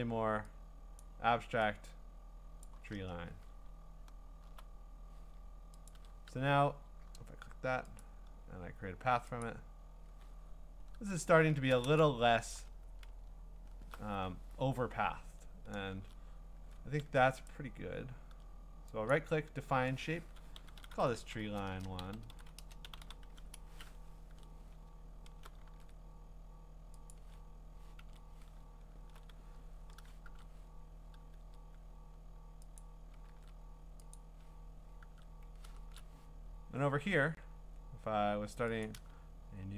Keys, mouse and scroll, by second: 1.0 click, 3.1 Return, 3.6-4.7 scroll, 5.9 ctrl+click, 8.0 click, 9.4 click, 10.3-11.6 scroll, 12.5 click, 12.9 scroll, 15.1-15.9 scroll, 17.0 a, 17.5 right click, 19.1 click, 20.4-24.2 typing, 21.3 click, 24.3 Tab, 25.0-25.7 scroll, 25.7 ctrl+w, 27.7 click, 28.0 ctrl+Tab, 28.8-29.1 scroll, 28.8 click, 30.2 ctrl+Tab, 32.8 click, 33.3 ctrl+w, 34.2 click, 35.0 ctrl+Tab, 35.8 ctrl+shift+Tab, 37.0-37.4 scroll, 37.5 scroll up 12, 38.8 middle click, 39.6-39.7 scroll down 4.